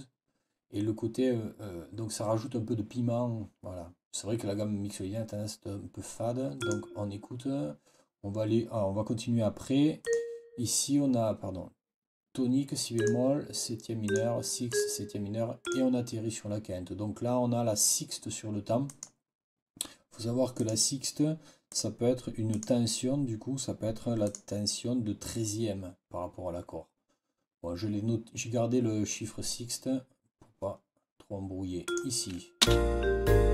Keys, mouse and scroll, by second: 6.5 click, 9.9 click, 12.9 click, 13.9 click, 14.6 click, 15.5 click, 18.8 click, 20.5 click, 21.6 click, 22.4 click, 24.1 click, 31.7 click, 32.5 space.